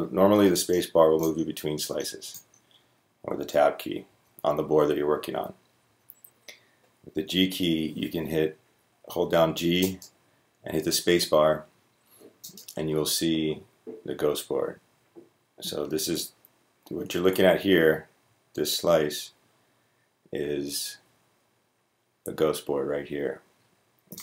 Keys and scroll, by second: 7.0-8.5 g, 9.0 g, 9.5 g, 15.3-16.1 g, 16.7 g, 17.2 g, 17.7-22.9 g.